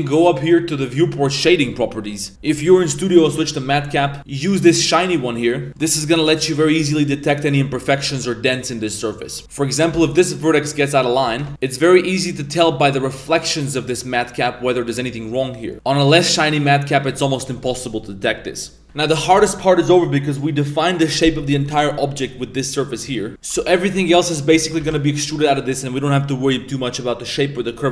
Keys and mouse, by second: 0.3-4.9 drag, 5.0-5.8 middle drag, 6.0-7.6 middle drag, 7.8-8.2 middle drag, 8.5-8.8 middle drag, 9.3 Tab, 9.3 middle click, 9.4 Tab, 9.4 ctrl+z, 9.9 alt+s, 11.4 Tab, 11.5-17.2 middle drag, 20.3-20.8 middle drag, 21.3 middle click, 22.3-22.9 middle drag, 23.3 Tab, 23.3 ctrl+s, 23.7 middle click, 23.9 1, 24.3 alt+right click, 24.6 Tab, 24.8 1, 25.1 alt+right click.